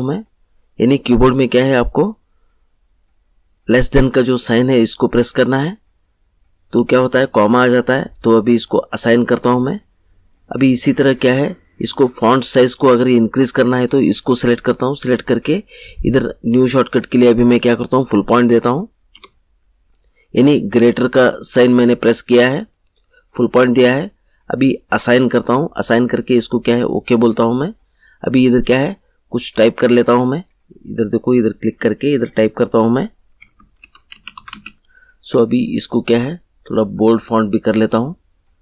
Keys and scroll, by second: 19.0 ., 33.3 Caps_Lock, 33.5-35.0 typing.